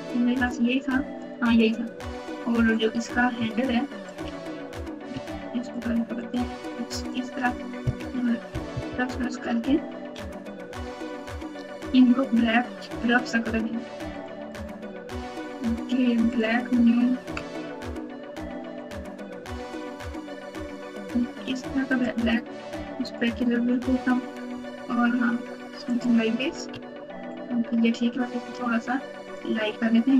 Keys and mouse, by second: 0.4 click, 3.3 Tab, 5.6 alt+click, 6.1 alt+click, 6.6 alt+click, 7.0 alt+click, 8.5 ctrl+KP_Add, 11.2 ctrl+KP_Subtract, 14.1 click, 14.5 click, 16.3 click, 18.7 click, 22.6 click, 25.8 click, 26.6 Tab, 29.3 click.